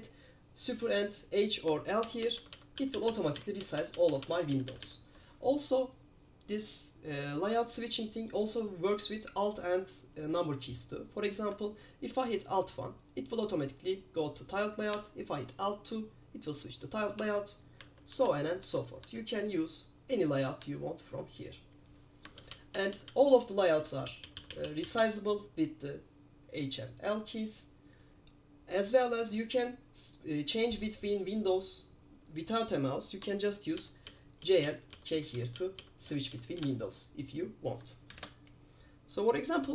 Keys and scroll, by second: 2.2 super+h, 2.3 super+h, 2.5 super+h, 2.6 super+h, 2.9 super+l, 3.0 super+l, 3.2 super+l, 3.3 super+l, 3.5 super+l, 3.7 super+h, 3.9 super+h, 4.2 super+h, 4.3 super+h, 4.6 super+l, 4.8 super+l, 4.9 super+l, 12.2 alt+1, 15.0 alt+2, 17.4 alt+3, 17.9 alt+4, 18.2 alt+5, 18.7 alt+6, 19.1 alt+7, 20.3 alt+8, 20.7 alt+7, 22.5 super+h, 22.6 super+h, 23.0 super+h, 23.2 super+h, 23.5 super+h, 23.7 super+h, 23.9 super+h, 24.2 super+l, 24.3 super+l, 24.5 super+l, 24.6 super+l, 24.7 super+l, 24.9 super+l, 25.1 super+l, 25.2 super+l, 33.9 super+j, 34.2 super+j, 34.5 super+j, 34.7 super+j, 35.0 super+j, 35.3 super+j, 35.5 super+j, 35.7 super+j, 35.9 super+j, 36.2 super+j, 36.4 super+j, 36.7 super+j, 38.3 alt+1.